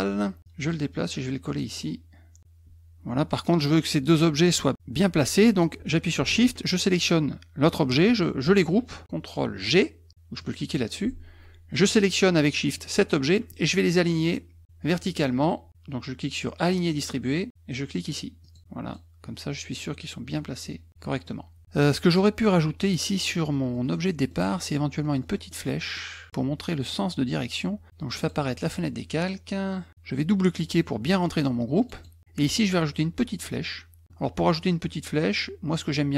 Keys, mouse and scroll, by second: 0.4-2.4 drag, 7.0 shift+click, 10.4 click, 12.7 shift+click, 16.7 click, 18.4 click, 18.9 click, 19.7 click, 23.3 middle click, 23.3-24.3 scroll up 4, 23.5 middle click, 25.0 scroll up 1, 25.5 middle click, 26.0 middle click, 28.2 click, 28.7 click, 30.5 click, 30.7 click, 31.0 click, 31.8 click, 32.0 click, 35.7 click.